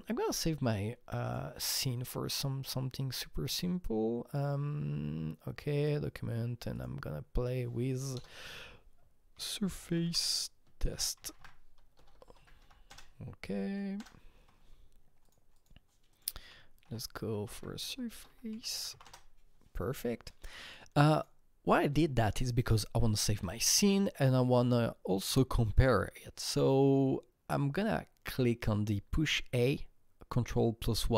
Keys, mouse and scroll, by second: 0.2 click, 0.2-1.2 scroll down 1, 1.2 click, 5.8 click, 6.7 click, 8.1-13.1 typing, 9.6 click, 10.0 click, 13.9 Return, 15.2 click, 15.5 click, 16.1 click, 16.3-19.4 typing, 21.1 click, 21.9 click, 23.2 ctrl+s.